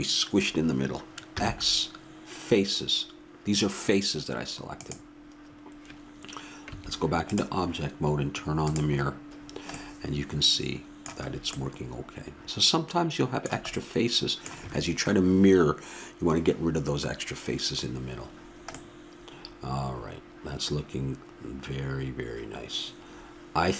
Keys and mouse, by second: 1.4 x, 6.7 Tab, 8.7-9.9 drag, 9.9-21.1 middle drag.